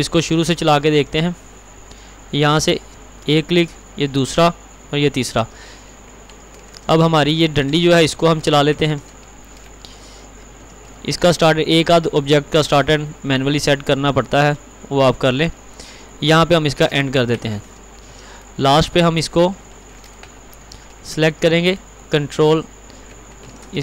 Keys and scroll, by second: 9.0 ctrl+r, 20.6 ctrl+u, 23.5 ctrl+r.